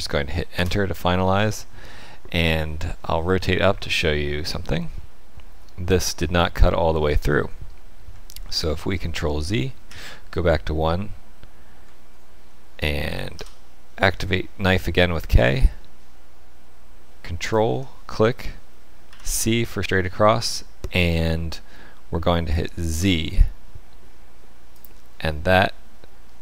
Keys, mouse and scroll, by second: 3.6 middle click, 8.4 ctrl+z, 9.8 KP_1, 13.3 k.